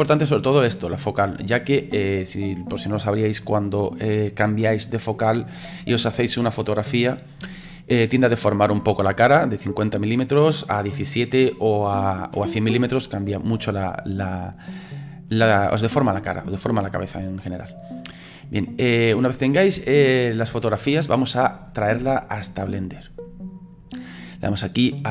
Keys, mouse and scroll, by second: 19.9-22.9 shift+middle drag, 25.0 click.